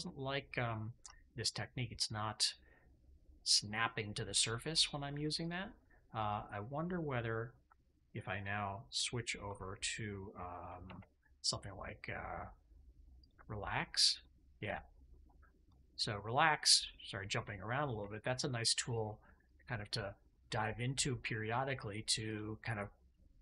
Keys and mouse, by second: 0.4 middle click, 1.0 shift+middle click, 1.3 middle click, 2.8-5.0 middle drag, 5.3 click, 5.7 middle click, 10.8 alt+q, 13.9 click, 14.5 click, 14.8 click, 15.5 click, 15.8 middle click, 16.7 middle click, 17.0 middle click, 17.9 shift+middle click, 18.5 middle click, 19.3 click, 20.2 click, 20.7-21.8 middle drag, 22.2 click, 22.6 click, 23.0 click, 23.3 click.